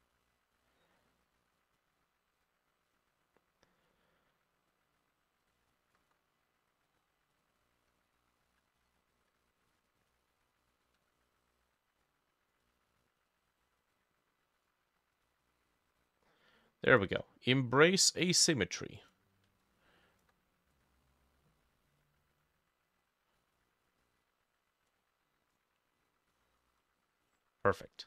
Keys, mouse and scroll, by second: 5.5 ctrl+click, 7.6 ctrl+click, 19.7 ctrl+click, 26.1-27.3 scroll down 2, 27.3-27.8 scroll up 4, 27.8-28.0 scroll down 2.